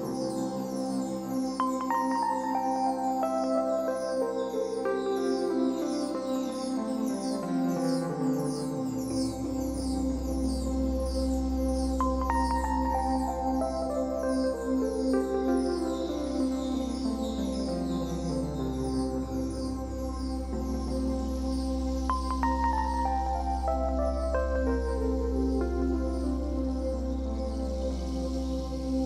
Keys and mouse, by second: 18.7 typing, 21.8 alt+click, 21.8 alt+middle click, 21.8 alt+right click, 22.7-23.7 alt+drag, 22.7-23.7 alt+middle drag, 22.7-24.2 alt+right drag, 26.0 click, 27.6-27.9 alt+drag, 27.6-27.9 alt+middle drag, 27.6-27.9 alt+right drag, 28.8 click.